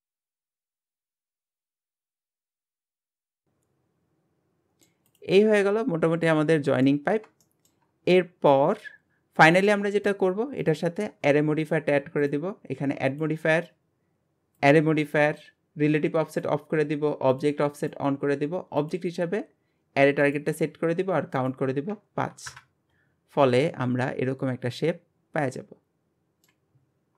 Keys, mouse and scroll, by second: 0.4 Tab, 0.6 Tab, 0.7 shift+middle click, 0.8 scroll up 2, 0.9 click, 1.4 scroll down 2, 1.5 shift+middle click, 1.6 scroll up 2, 1.7 click, 1.9 g, 2.3 Tab, 2.7 ctrl+z, 2.8 ctrl+z, 3.1 Tab, 3.1 scroll down 1, 3.3 alt+z, 3.4-5.1 middle drag, 5.1 click, 5.4-7.1 middle drag, 7.1-7.4 scroll up 1, 7.4-9.1 shift+middle drag, 9.6 scroll up 1, 9.7-10.6 middle drag, 10.6 click, 11.0-12.2 scroll down 3, 12.2 click, 14.7-16.1 drag, 16.3 click, 17.3 click, 17.8 click, 18.2 scroll down 2, 18.8 scroll down 2, 18.8-23.3 drag, 23.3-23.6 scroll down 1, 23.6-26.7 middle drag.